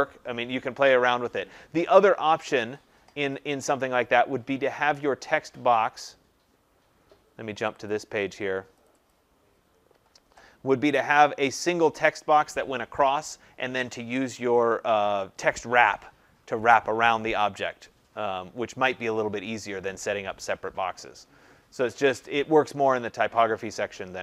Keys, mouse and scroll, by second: 6.0 click, 7.6 click, 7.8 click, 8.8 click, 9.0 click.